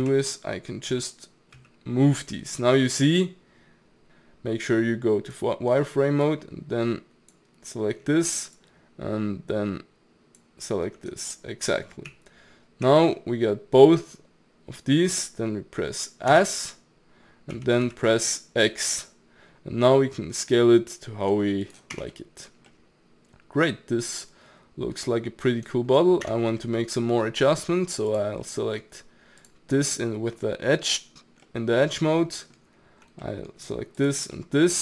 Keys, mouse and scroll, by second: 0.0 g, 4.0 click, 6.2 click, 8.6 shift+click, 12.1 z, 13.1-16.2 middle drag, 16.3 s, 21.9 Tab, 22.2-22.5 middle drag, 22.5 scroll down 1, 22.7-26.3 middle drag, 26.3 Tab, 26.7-28.1 middle drag, 28.1 click, 28.4 middle click, 29.4 click, 31.5-34.0 middle drag, 34.0 shift+click, 34.4 middle click.